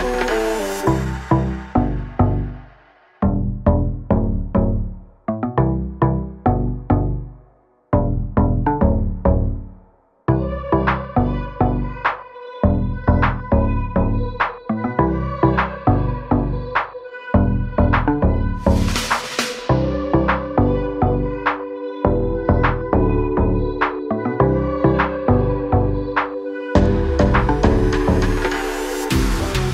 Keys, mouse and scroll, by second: 0.2 click, 10.1 i, 13.6 click, 16.2 click, 21.6 a, 21.9 click, 24.6 click.